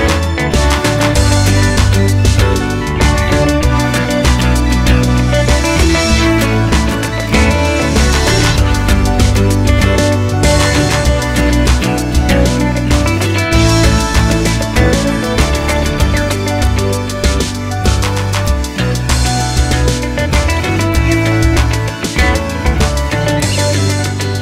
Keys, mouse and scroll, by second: 3.3 KP_Enter, 3.9 KP_7, 4.9 g, 6.2 scroll up 1, 7.3 g, 9.4 shift+click, 9.8 KP_1, 10.6 scroll down 1, 11.1-15.1 shift+middle drag, 11.4 scroll up 1, 12.2 z, 12.5 scroll up 1, 13.0 g, 15.1 shift+click, 15.3-19.8 middle drag, 15.7 Tab, 16.1 scroll down 1, 17.4 z, 19.2 shift+Tab, 19.8-24.4 drag.